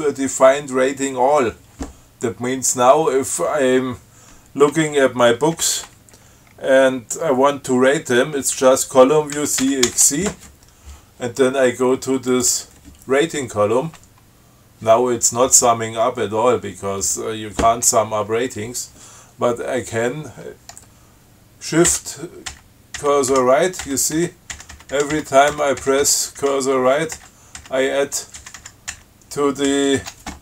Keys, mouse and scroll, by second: 2.2 scroll down 2, 5.8 Up, 9.7 ctrl+c, 9.9 ctrl+x, 10.2 ctrl+c, 12.6 click, 22.2 shift+Right, 27.4 shift+Right, 28.7 shift+Right, 30.0 shift+Right.